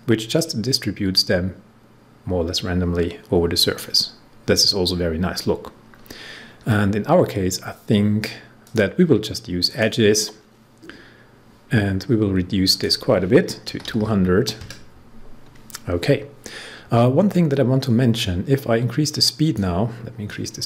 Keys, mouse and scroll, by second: 8.6 click, 12.6 click, 13.4-14.4 typing, 18.0-20.6 drag.